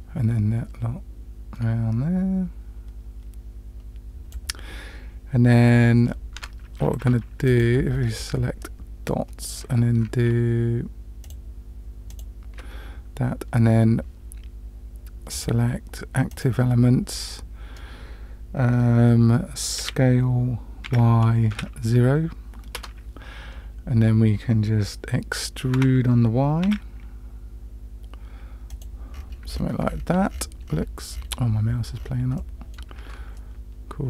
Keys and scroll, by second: 19.8 s, 25.8 e, 33.0 Tab.